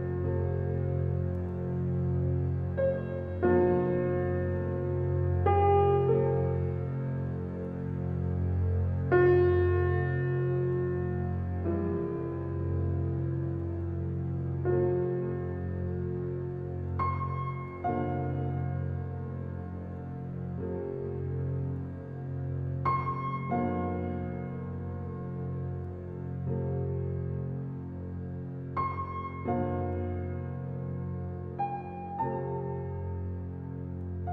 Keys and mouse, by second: 2.8 click, 3.5-4.2 drag, 4.5-5.5 drag, 7.0-7.6 drag, 8.1 click, 8.9-9.5 alt+shift+drag, 9.7-10.9 alt+drag, 11.5 click, 16.9 click, 17.7 click, 18.4 click, 19.2 click, 19.8 click, 21.2 click, 21.8-22.8 alt+drag, 23.4 click, 24.5 click, 25.5 click, 28.0 click, 29.9 alt+a, 30.5-32.2 drag, 33.6-34.3 ctrl+alt+drag.